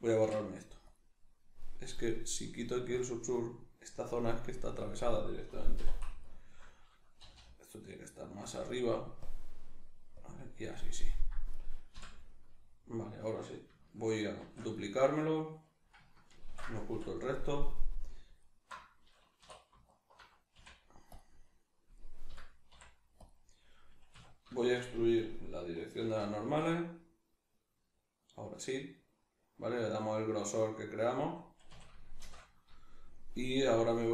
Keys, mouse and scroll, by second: 0.2 x, 1.6 right click, 3.0-5.8 drag, 5.8 2, 6.2 alt+right click, 7.2 g, 8.6 click, 11.5 right click, 11.9 l, 12.3-14.4 middle drag, 14.4 shift+d, 14.9 right click, 16.4 ctrl+i, 17.0 h, 18.4 alt+right click, 19.5 3, 19.9 alt+right click, 20.5 x, 21.9 right click, 22.3 l, 24.5 shift+middle click, 26.0 alt+e, 31.3 click, 31.7 a, 32.2 shift+n, 33.6 alt+right click.